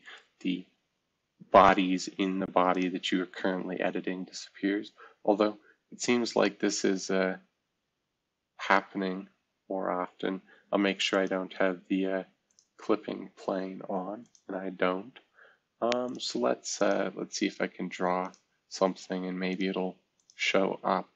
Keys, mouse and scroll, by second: 0.0-1.6 drag, 2.7-4.0 drag, 4.0-4.9 scroll down 2, 4.9-6.2 scroll up 2, 8.7 middle drag, 11.1-12.5 drag, 15.0-16.0 scroll down 1, 16.0-19.2 drag, 19.4 click.